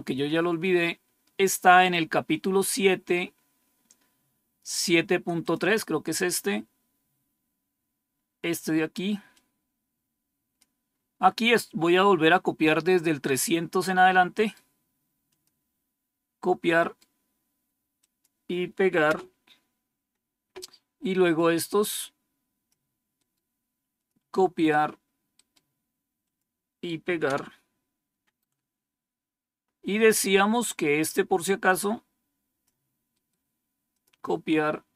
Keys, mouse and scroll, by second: 1.3 scroll down 2, 1.9-2.8 scroll down 6, 3.4 scroll down 2, 5.3 click, 6.8-7.4 scroll down 3, 9.2-10.5 drag, 14.3 right click, 15.2 click, 16.7 right click, 17.9 click, 19.0 Return, 21.3-22.6 drag, 23.1 right click, 23.9 click, 25.2 right click, 26.1 click, 27.2 Return, 28.8 scroll down 2, 29.5 scroll down 2, 31.6-32.6 drag, 33.1 right click, 33.8 click.